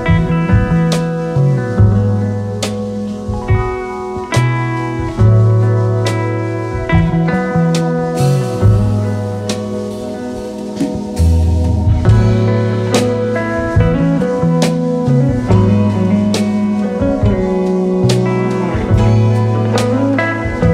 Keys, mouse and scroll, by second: 7.6-20.7 drag.